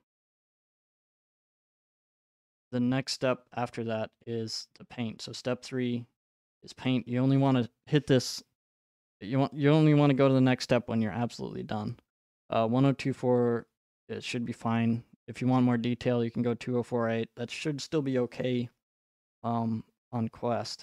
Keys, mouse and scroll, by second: 10.3 click.